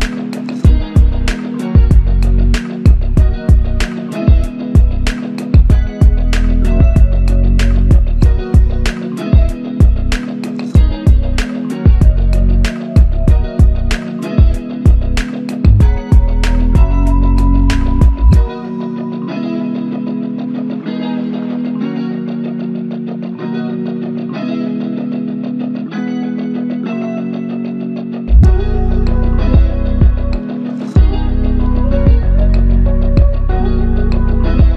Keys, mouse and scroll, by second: 2.9 alt+click, 4.3 alt+l, 4.5 ctrl+i, 6.9 typing, 9.2 double click, 13.7 shift+click, 17.1 shift+click, 21.7 ctrl+alt+click, 24.5 ctrl+alt+click, 25.6 alt+click, 30.8 alt+m, 32.2 ctrl+alt+click.